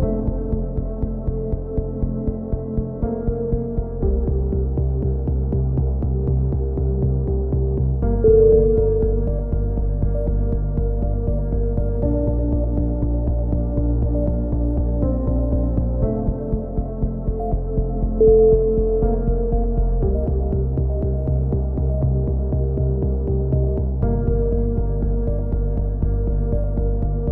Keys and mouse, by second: 2.4 a, 2.6 click, 3.2 ctrl+r, 3.5 right click, 3.8 k, 4.2 right click, 4.3 KP_7, 5.9 right click, 6.3 g, 8.4 a, 8.5 k, 10.5 a, 10.7 click, 11.2-13.5 right drag, 12.2 f, 13.4 f, 13.4 a, 13.7 click, 14.2 click, 14.7 a, 15.0 ctrl+n, 15.2 a, 15.4 z, 15.5 z, 15.6 click, 17.0 right click, 17.0 f, 17.3 right click, 17.8 f, 17.9 a, 19.6 right click, 19.6 f, 19.7 a, 20.0 middle click, 21.3 middle click, 21.6 k, 21.9 right click, 22.1 KP_3, 22.4 click, 23.5 right click, 23.7 a, 23.9 k, 26.0 a, 26.7 click, 27.1 ctrl+z.